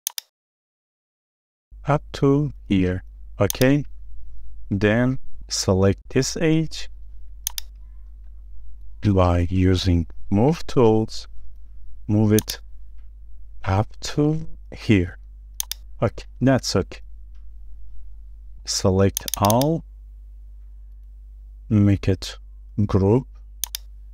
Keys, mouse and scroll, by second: 0.8 shift+middle click, 4.0 middle click, 4.7 shift+middle click, 5.8 space, 5.8 scroll up 1, 8.1-8.4 scroll down 1, 8.4 middle click, 10.0 m, 16.2-16.5 scroll up 1, 16.5 middle click, 16.8-17.3 scroll down 1, 17.3 space, 17.6-18.0 scroll down 1, 18.0 middle click, 18.6 scroll down 1, 19.4 double click, 21.9 right click.